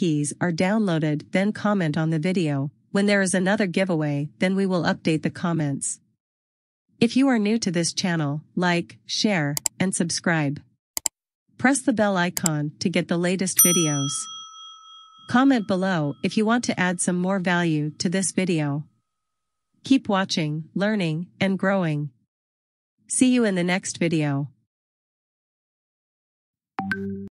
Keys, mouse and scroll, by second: 2.4 click.